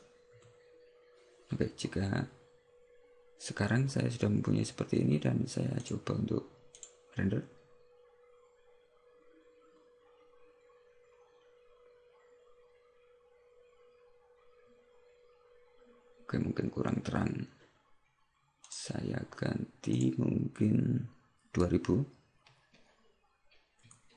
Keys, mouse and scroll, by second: 0.0 0, 6.0 click.